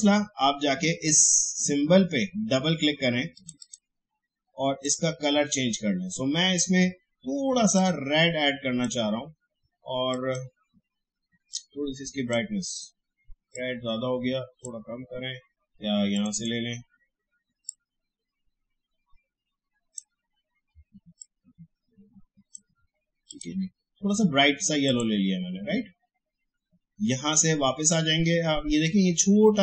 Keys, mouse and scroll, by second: 3.3 click, 7.7-23.3 drag.